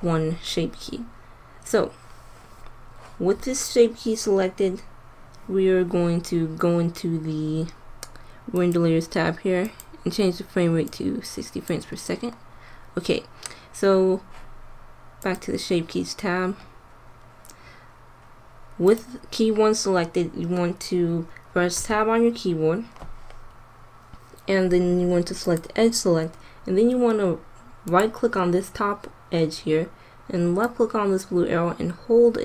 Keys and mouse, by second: 8.5-11.5 drag, 15.1-16.9 drag, 16.9 middle click, 20.7 middle click, 21.6 Tab, 25.4-27.4 drag, 27.7-29.6 drag, 30.5-32.3 drag.